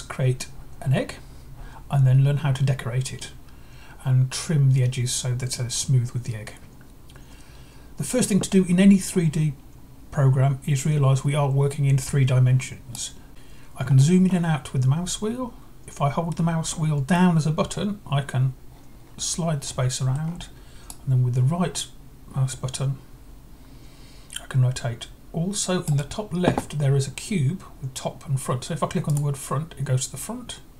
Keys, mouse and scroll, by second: 12.9 right click, 13.7 scroll down 1, 14.3 scroll up 4, 17.1-20.1 middle drag, 20.9-25.8 right drag, 29.1-30.1 drag.